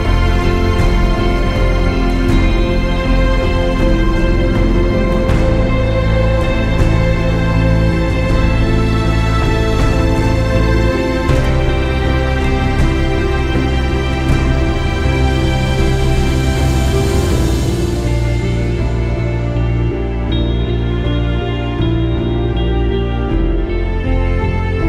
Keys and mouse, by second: 1.5 space, 1.7 click, 1.9 space, 5.3 click, 6.9 space, 7.0 click, 10.1 click, 14.2 click, 16.4 click, 16.7-17.0 typing, 16.7 click, 19.0 click, 20.6-21.3 typing, 22.8 space, 23.2 space.